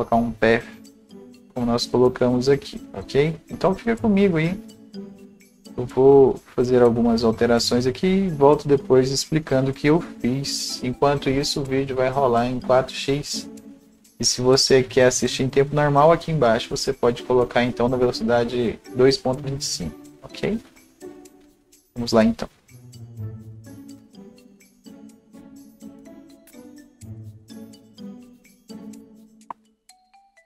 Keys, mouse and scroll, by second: 3.9 click, 3.9-5.1 right drag, 4.6-5.1 scroll up 1, 5.1-7.8 right drag, 5.8-6.3 scroll up 1, 6.6-8.7 drag, 8.5 scroll down 1, 11.8-12.3 scroll up 1, 21.1 click, 24.3 shift+scroll down 1, 24.5-24.9 shift+scroll up 1, 25.2 click, 25.4 KP_Subtract, 25.5 KP_4, 25.6 Tab, 25.6 KP_5, 26.0 KP_Enter, 26.4 click, 27.6 right click, 27.7 scroll down 1, 27.8 right click, 28.0 click, 29.2 KP_Subtract, 29.3 KP_3, 29.4 Tab, 29.4 KP_5, 29.9 KP_3, 30.1 KP_Enter.